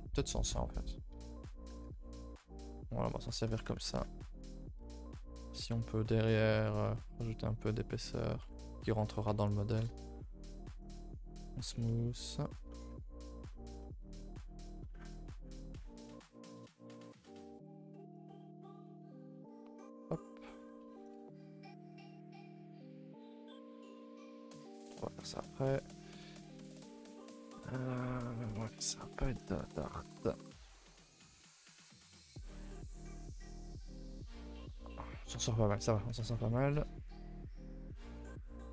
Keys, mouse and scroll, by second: 1.1 KP_3, 1.8 g, 3.5 2, 3.8 alt+click, 4.5 e, 8.2 g, 9.2 Tab, 9.7 KP_0, 11.8 middle click, 12.3-13.5 scroll up 14, 12.6 shift+middle click, 13.5-15.1 shift+middle drag, 15.1 scroll up 4, 15.3-17.5 typing, 17.1 scroll up 1, 19.7 KP_3, 20.3 scroll up 1, 20.6 g, 23.5 a, 23.7 a, 23.9 2, 24.2 alt+click, 24.8 middle click, 25.0 middle click, 25.6 scroll down 2, 25.7 a, 25.9 a, 26.3 click, 26.7 shift+click, 27.0 shift+click, 27.3-28.5 middle drag, 28.5 KP_3, 29.1 g, 31.3 shift+middle click, 32.8 KP_3, 33.2 g, 34.7 Tab, 35.0 scroll down 1, 35.3 Tab, 35.5 middle click.